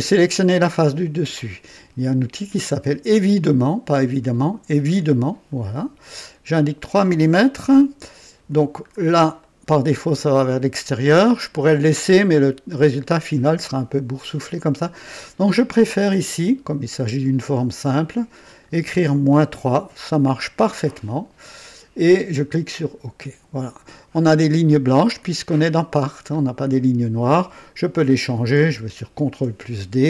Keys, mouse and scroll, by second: 4.9 click, 6.5 click, 7.6 KP_3, 8.8 scroll up 2, 9.4-10.3 right drag, 10.4-11.9 drag, 17.2 click, 17.9 click, 19.3 KP_Subtract, 22.8 click, 25.1-26.4 drag, 28.1 click, 29.2 d.